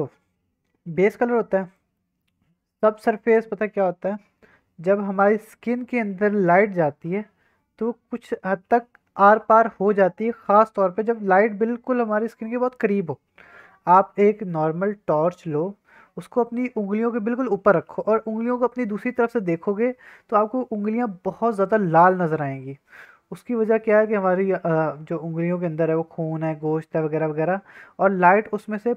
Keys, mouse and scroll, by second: 1.7 click, 1.7 middle click.